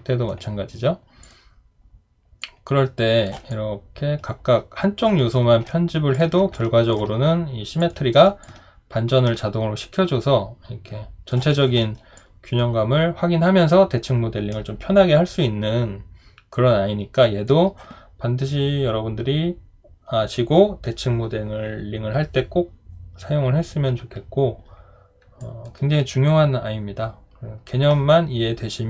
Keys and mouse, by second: 3.5 alt+click, 5.2 alt+right click, 6.5 alt+click, 11.3 alt+click, 11.5 alt+right click, 11.8 alt+middle click, 12.2 alt+click.